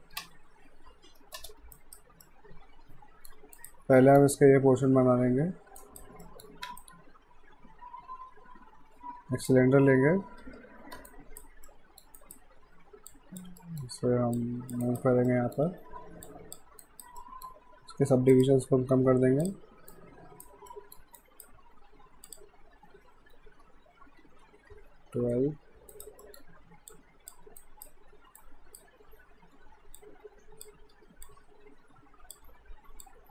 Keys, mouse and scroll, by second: 0.2 space, 1.8 right click, 2.2 middle click, 3.6 right click, 4.0 middle click, 5.8 right click, 6.3 middle click, 6.8 right click, 10.5 w, 11.1 alt+right click, 11.7 alt+middle click, 12.2 alt+right click, 13.1 click, 13.6 alt+middle click, 14.4 click, 14.8 alt+right click, 15.3 alt+middle click, 16.3 click, 16.8 alt+right click, 17.2 alt+middle click, 18.3 click, 19.9 alt+right click, 20.7 alt+middle click, 21.2 right click, 22.3 click, 25.8 alt+Num_Lock, 25.9 right click, 26.2 middle click, 26.9 click, 27.6 alt+right click, 29.5 r, 30.0 click, 30.9 w, 31.3 click, 32.5 r, 33.1 click.